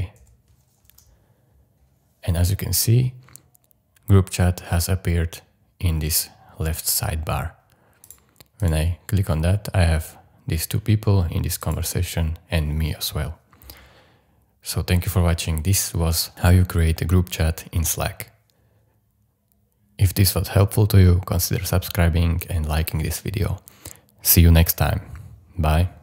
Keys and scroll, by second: 0.0-0.2 typing, 0.9 Return.